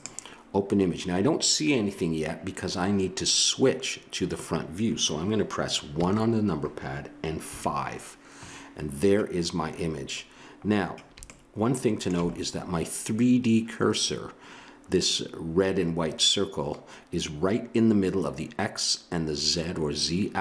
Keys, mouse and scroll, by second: 0.0-1.7 drag, 6.0 KP_1, 7.4 KP_5.